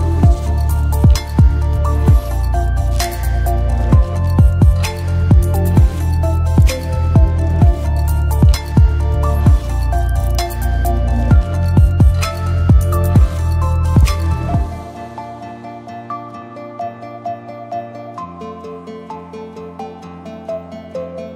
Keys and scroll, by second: 20.6 r, 21.1 h.